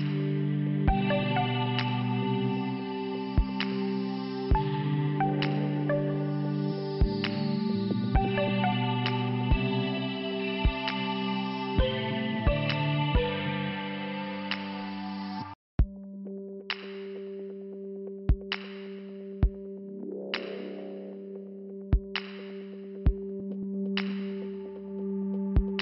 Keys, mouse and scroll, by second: 0.4 click, 5.7 click, 7.0 click, 9.4 click, 10.4 click, 12.4 click, 13.7 click, 15.0 click, 21.6 click.